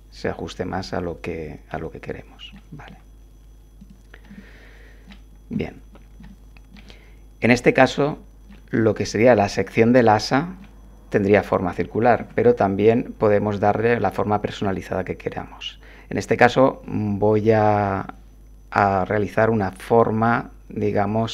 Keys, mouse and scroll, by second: 2.9 Tab, 3.8 click, 4.3 click, 5.5 7, 6.3 shift+click, 7.6-8.7 middle drag, 10.0 click, 12.2 7.